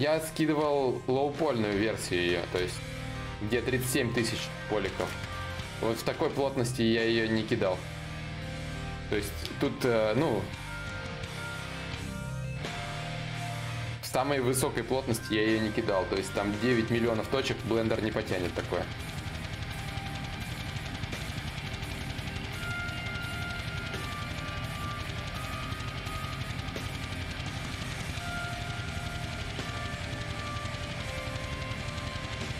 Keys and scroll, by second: 29.3 ctrl+a.